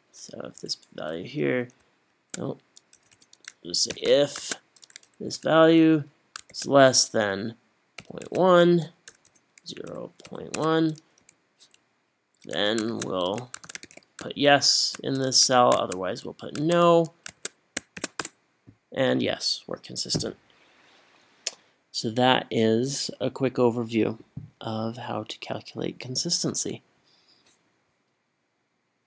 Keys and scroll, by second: 0.6 Up, 3.0-4.6 typing, 5.3 Up, 6.5 shift+,, 8.0-11.2 typing, 12.9-18.0 typing.